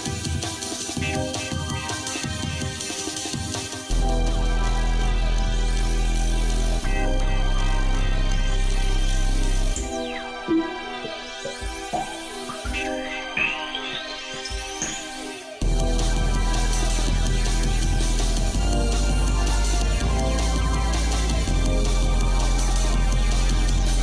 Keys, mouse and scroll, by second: 2.3-3.5 shift+middle drag, 4.0 shift+middle click, 4.6 click, 5.0 shift+middle click, 6.1 g, 9.6-11.1 shift+middle drag, 11.2-11.8 scroll up 2, 12.7 g, 15.2-18.5 shift+middle drag, 18.6 middle click, 19.0 shift+middle click, 19.6 middle click, 20.4 click, 20.8 shift+middle click.